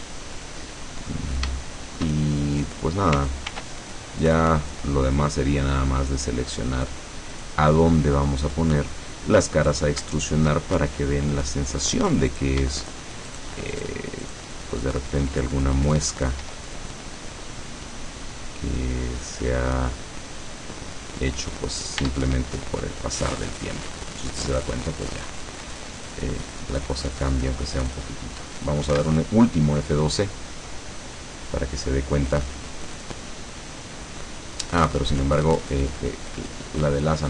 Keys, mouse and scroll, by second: 0.1 click, 0.7 middle click, 1.4 scroll down 1, 1.7 shift+middle click, 2.4 shift+scroll up 1, 3.6 ctrl+r, 4.3 click, 7.4 click, 8.9 scroll down 2, 9.7 right click, 10.3 shift+right click, 11.8 click, 12.4 right click, 12.9 shift+right click, 13.3 shift+right click, 13.9 shift+right click, 14.3 shift+right click, 16.5 e, 21.3 click, 21.5-21.9 scroll down 1, 22.1 Tab, 22.5-23.5 scroll down 3, 23.7-25.3 middle drag, 25.6-26.2 scroll up 4, 27.1 click, 28.1-28.5 scroll down 2, 29.0 F12, 34.3-34.8 scroll up 2, 35.2 scroll down 2.